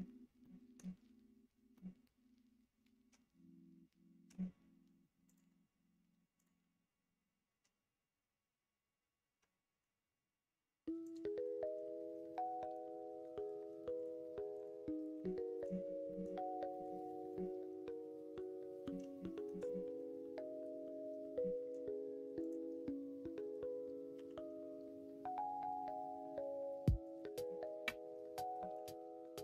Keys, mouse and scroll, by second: 0.3 middle click, 1.7-4.3 middle drag, 5.2-6.4 drag, 11.0-14.1 drag, 15.1 middle click, 16.0 middle click, 16.6 middle click, 17.2-18.8 middle drag, 19.1 shift+middle click, 19.6-21.3 middle drag, 22.4 click, 24.1 g, 27.3-28.5 middle drag, 28.8 ctrl+z.